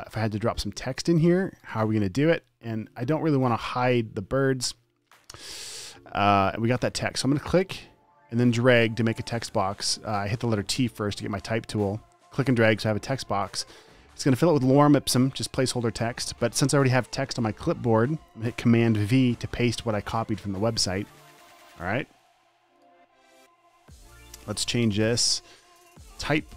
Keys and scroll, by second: 1.7 space, 3.4 typing, 7.1 t, 19.5 super+v, 23.5-24.7 typing.